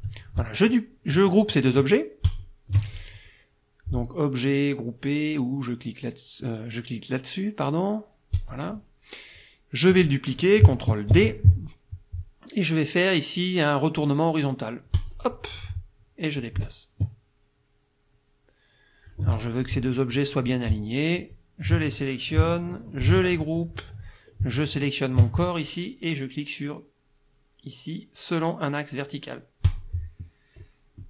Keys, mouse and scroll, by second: 2.3 shift+click, 8.4 click, 11.1 ctrl+d, 15.0 click, 16.4-19.3 ctrl+drag, 21.2 shift+click, 23.1 ctrl+g, 24.7 shift+click, 29.7 click, 30.6 click.